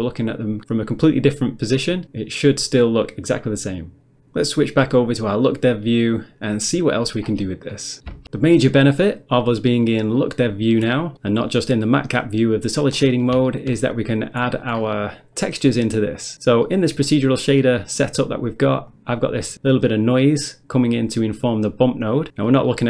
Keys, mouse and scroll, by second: 2.0 click, 3.0 click, 5.4 click, 6.5 middle click, 7.3-7.7 scroll down 1, 7.7 middle click, 13.0 scroll down 1, 13.5 shift+middle click, 13.8 middle click, 14.0 middle click, 14.5-14.9 scroll down 1, 14.9 middle click, 15.4 middle click, 15.7 middle click, 16.3 middle click, 16.7 middle click, 17.6 middle click, 18.9 click, 19.5 click, 21.6 click, 22.5 middle click.